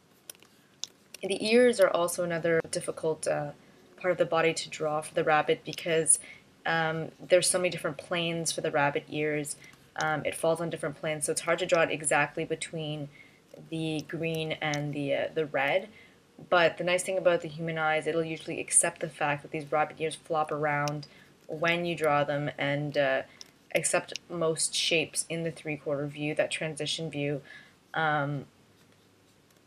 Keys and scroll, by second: 0.4 space, 1.4 space, 2.0 space, 6.3 space, 10.6 space, 12.3 space, 14.6 space, 15.3 space, 22.2 space, 23.9 space.